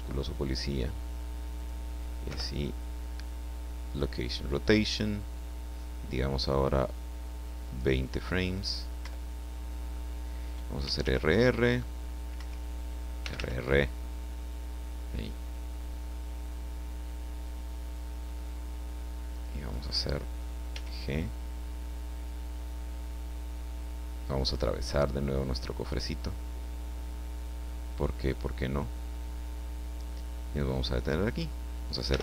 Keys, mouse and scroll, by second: 1.6 click, 2.2 i, 3.8 click, 7.6 click, 9.0 Left, 10.8 r, 12.4 Escape, 13.2 r, 19.6 click, 20.7 g, 21.0 middle click, 31.3 click, 32.1 i.